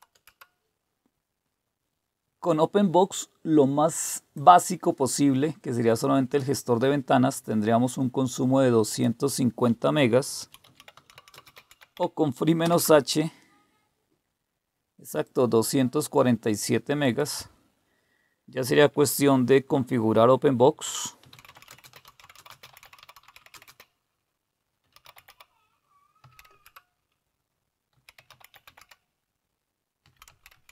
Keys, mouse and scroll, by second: 0.0-0.1 typing, 4.3-6.7 drag, 8.9 click, 10.2-12.6 typing, 15.2 click, 17.0 click, 21.0-26.2 typing, 26.5 Return, 27.7-30.7 typing.